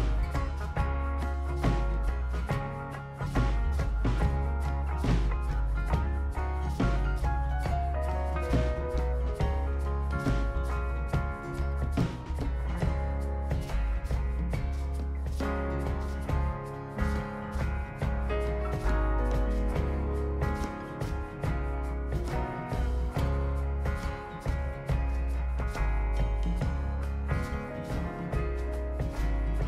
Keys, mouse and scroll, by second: 0.0 click, 0.5 click, 1.0-1.7 scroll down 3, 1.9 click, 2.7 scroll up 2, 3.3 click, 3.8 right click, 4.3 click, 5.5 click, 6.0 click, 6.5 scroll down 1, 6.8 right click, 7.3-8.5 drag, 8.8 right click, 10.7 click, 15.9 click, 17.4 click, 18.1 click, 18.9 click, 19.3 3, 20.0 click, 21.1 click, 22.0 scroll up 2, 23.0 click, 23.7 5, 24.6 click, 25.0 click, 25.6 click, 26.6 3, 27.2 click, 27.6 click.